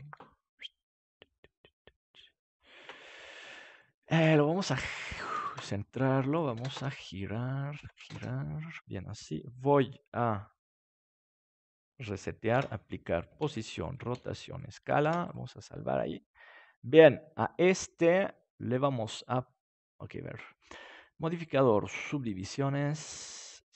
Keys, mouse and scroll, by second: 0.3 s, 2.4-12.5 drag, 12.5 ctrl+a, 13.3 ctrl+a, 14.1 ctrl+a, 15.0 ctrl+s, 20.8-23.1 drag.